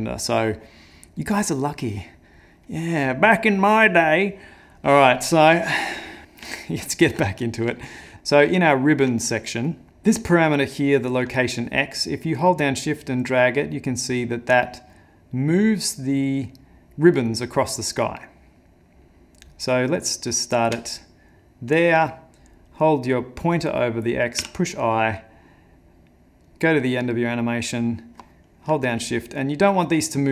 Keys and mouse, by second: 6.2 middle click, 6.6 ctrl+middle click, 7.4 middle click, 7.8 ctrl+middle click, 8.1 middle click, 8.5 ctrl+middle click, 9.7 middle click, 9.9 ctrl+space, 10.1 middle click, 11.7 shift+click, 26.5 click, 26.5 i, 28.9 shift+click.